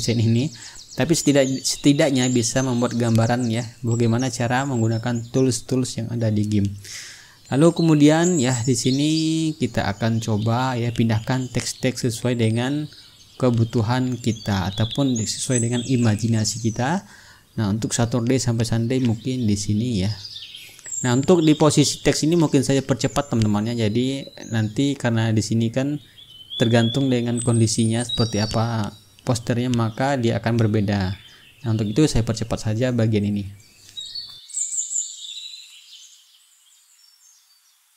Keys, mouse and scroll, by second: 1.4 t, 2.3 ctrl+a, 2.7 click, 4.7 KP_7, 4.9 KP_0, 6.7 click, 7.6-11.9 drag, 8.7-10.6 right drag, 13.2-14.3 drag, 15.0-17.2 ctrl+drag, 17.3-22.5 typing, 23.3 ctrl+a, 24.1 click, 24.9 KP_1, 25.0 KP_0, 25.3 Return, 29.8 ctrl+click, 30.1 ctrl+a, 30.6 click, 31.6 KP_7, 31.9 KP_0, 33.1 Return, 34.5 click, 34.8-37.9 typing, 34.9 click, 35.4 click, 35.7 click, 35.9 click, 36.1 ctrl+a, 36.3 ctrl+a, 36.7 ctrl+click, 37.4 click, 37.6 ctrl+click, 37.7 ctrl+a.